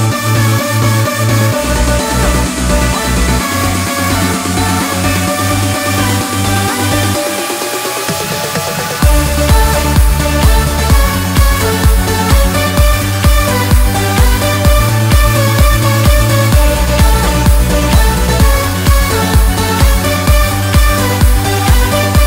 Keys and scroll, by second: 13.1 ctrl+e, 13.4 ctrl+j, 17.8 ctrl+e, 20.8 ctrl+t.